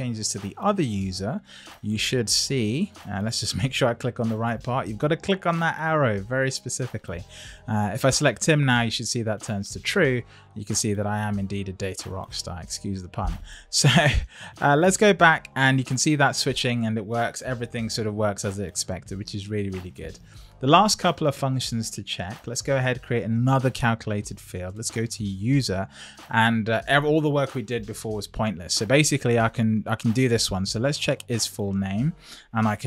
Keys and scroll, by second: 32.7 shift+'.